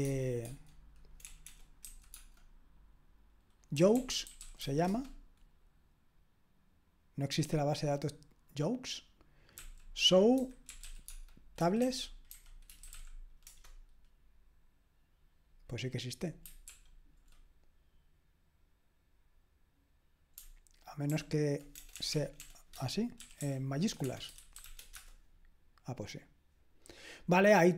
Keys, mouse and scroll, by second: 0.0-5.1 typing, 10.1-13.4 typing, 13.5 Return, 16.7 ctrl+p, 21.1 ctrl+p, 21.8-25.1 typing.